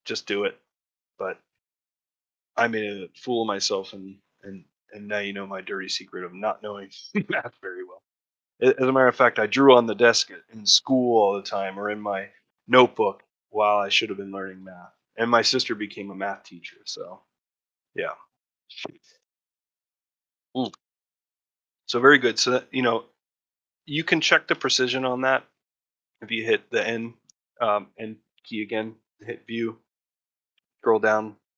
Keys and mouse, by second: 2.2 ctrl+middle click, 2.6 shift+middle click, 3.0 middle click, 3.3 shift+middle click, 3.6 middle click, 4.1 shift+middle click, 4.8 middle click, 5.2 middle click, 5.5 middle click, 5.9 middle click, 6.2 middle click, 6.6 shift+middle click, 7.1 middle click, 7.8-10.8 ctrl+middle drag, 11.0 middle click, 11.6 shift+middle click, 12.3 ctrl+middle click, 13.4 shift+middle click, 14.6 shift+middle click.